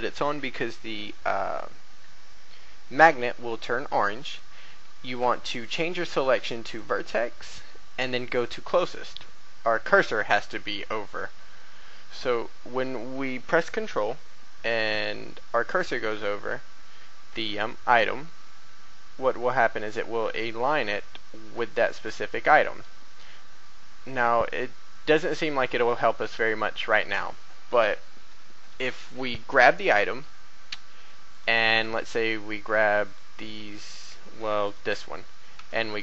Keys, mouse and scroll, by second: 5.6 click, 31.3 right click, 33.0 shift+right click, 34.3 shift+a, 34.6 right click, 35.5 g.